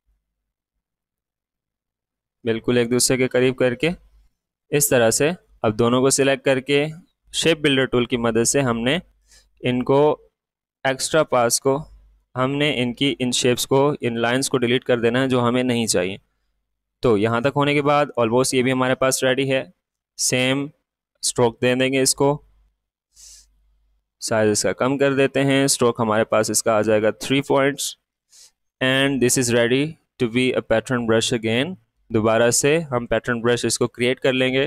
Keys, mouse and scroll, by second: 0.3 Left, 4.6-10.7 drag, 12.9-25.9 alt+drag.